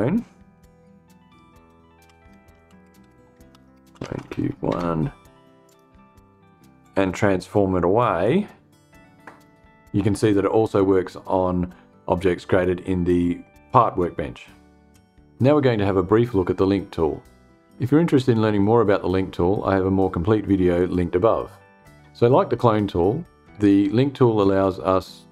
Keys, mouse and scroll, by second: 1.3-4.3 typing, 5.1 click, 6.3 click, 7.7-9.0 drag.